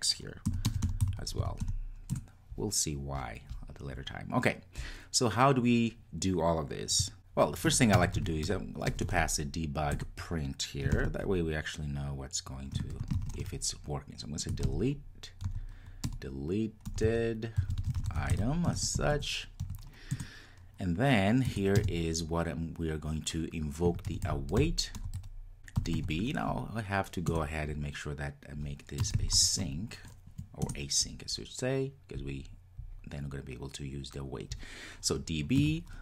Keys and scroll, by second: 2.2 Return, 10.0 Return, 27.4 Return.